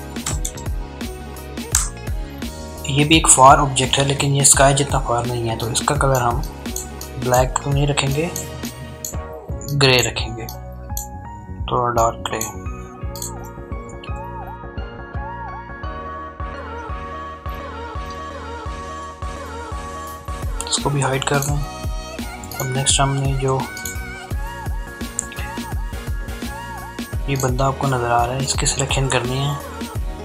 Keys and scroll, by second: 0.0-0.5 typing, 1.0 Return, 15.9 alt+BackSpace, 18.8 ctrl+d.